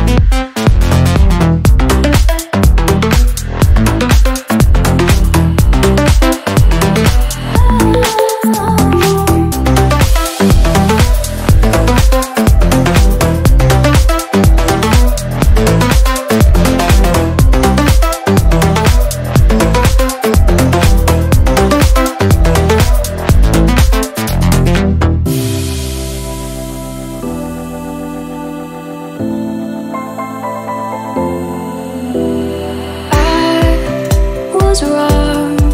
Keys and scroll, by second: 0.0 ctrl+z, 5.6 ctrl+z, 7.8 ctrl++, 10.0 ctrl+z, 12.6 ctrl+z, 13.2 ctrl+z, 17.0 ctrl+z, 18.3 ctrl+z, 19.8 ctrl++, 25.0 ctrl+z, 25.6 ctrl+z, 26.3 ctrl+z, 26.8 ctrl+z, 29.5 ctrl+z, 30.4 ctrl+-, 31.1 ctrl+z.